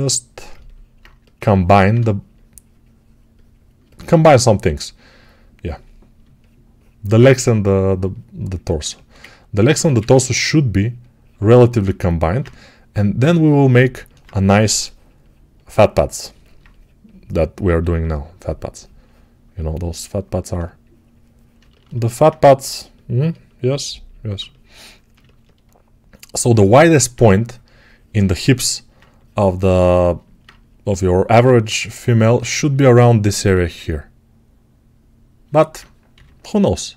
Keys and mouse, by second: 0.9-6.1 right drag, 6.1-8.7 shift+middle drag, 8.7-36.9 alt+shift+right drag, 9.7 1, 14.4 6, 36.0 g.